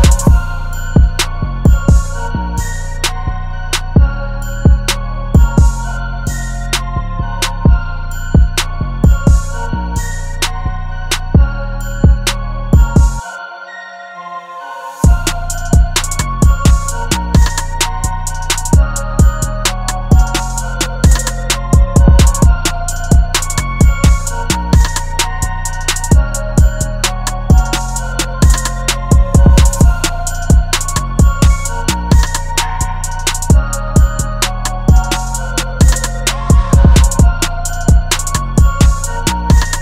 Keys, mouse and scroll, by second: 0.0 right click, 1.8 ], 1.9 ], 6.3 alt+click, 11.8-13.0 typing, 37.6 alt+click.